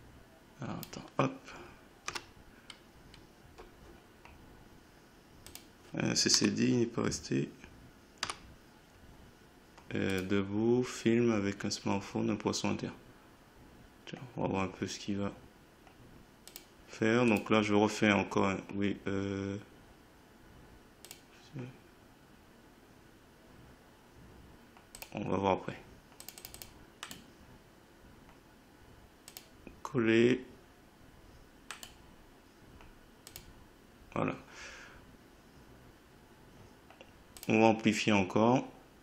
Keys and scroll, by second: 2.1 Delete, 6.3 Delete, 8.2 9.